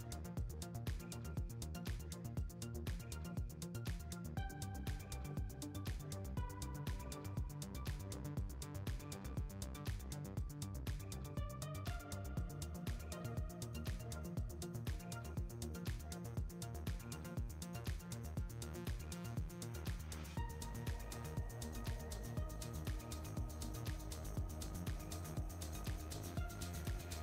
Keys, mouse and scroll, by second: 3.7-4.8 middle drag, 4.8-5.3 scroll down 4, 5.3-6.7 middle drag, 6.7-8.0 scroll up 2, 8.0-13.8 shift+middle drag, 13.8 r.